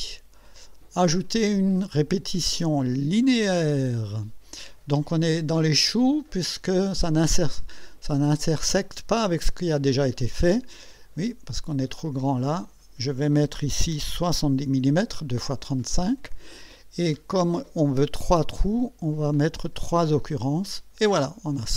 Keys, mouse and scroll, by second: 3.4 click, 12.3 click, 14.3 7, 14.7 0, 19.9 click.